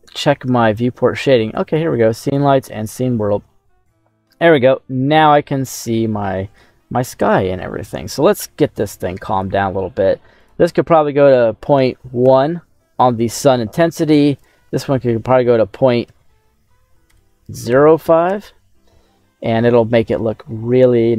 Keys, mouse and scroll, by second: 0.5-2.7 drag, 3.4-5.2 middle drag, 5.9 middle click, 6.3 scroll up 1, 9.2 click, 10.3-12.2 drag, 14.3-18.4 drag, 21.1 scroll down 1.